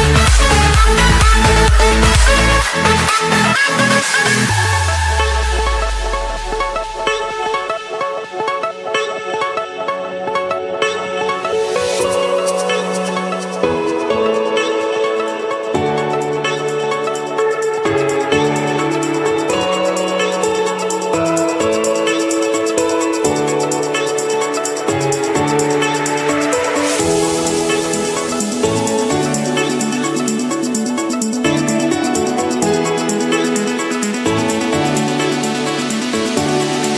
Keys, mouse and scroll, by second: 0.5 scroll, 0.6-1.0 scroll, 1.6 scroll up 1, 1.7 scroll, 2.3 Escape, 2.5 click, 3.1 click, 3.4-4.5 scroll, 4.7 click, 5.7 click, 6.0 scroll, 6.5 click, 7.0 Escape, 8.5 Return, 11.0 click, 12.2-15.3 typing, 15.8 Return, 18.1-19.2 typing, 20.4-21.1 typing, 25.4-26.5 drag, 26.6-27.7 drag, 29.5-30.6 drag, 31.2-32.4 drag, 32.4-32.9 scroll, 33.6 click, 34.0-34.7 scroll, 35.5 Escape.